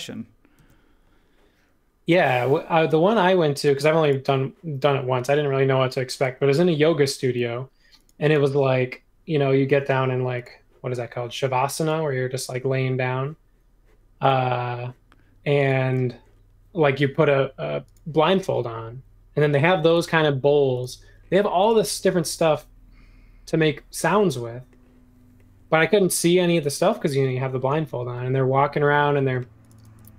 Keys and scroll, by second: 0.5 super+1.